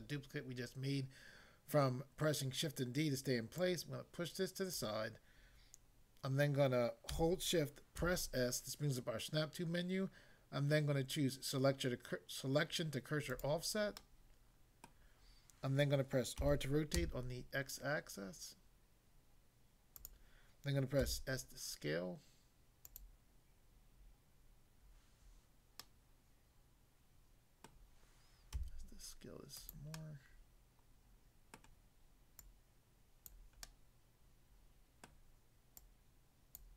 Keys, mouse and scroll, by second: 3.6 click, 4.8 click, 7.9 s, 13.3 click, 13.9 middle click, 14.9 middle click, 16.3 r, 17.0 x, 19.9 click, 21.1 s, 22.9 click, 25.8 middle click, 27.7 middle click, 28.5 s, 29.6 click, 29.9 middle click, 31.5 middle click, 32.5 click, 33.3 click, 33.7 middle click, 35.1 middle click, 35.7 click, 36.6 click.